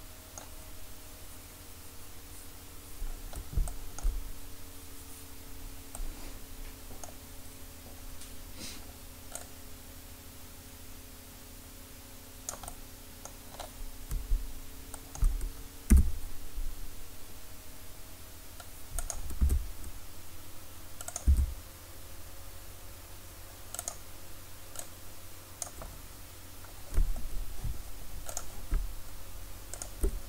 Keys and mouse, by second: 1.1-3.4 middle drag, 9.4-12.5 drag, 13.6-15.9 middle drag, 15.9 e, 19.1-23.2 drag, 19.4 e, 21.3 e, 24.8-30.0 drag, 30.0 middle click.